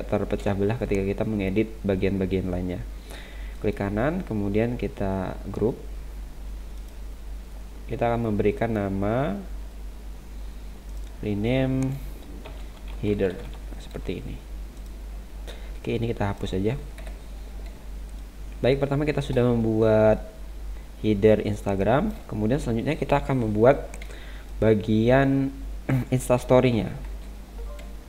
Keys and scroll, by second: 17.0 Delete, 17.8 space, 24.1 space, 27.0 ctrl+-.